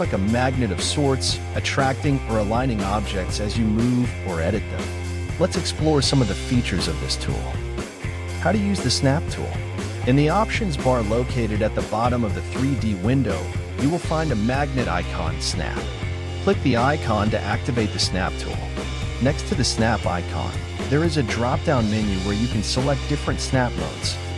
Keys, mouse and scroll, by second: 0.7-1.1 scroll up 1, 1.1 KP_1, 2.2 KP_5, 3.0 KP_5, 3.5 shift+middle click, 4.4-5.9 right drag, 6.5-8.5 scroll down 4, 8.8 click, 11.8 g, 16.3 g, 21.4 g, 23.4-24.1 scroll up 3, 24.1 g.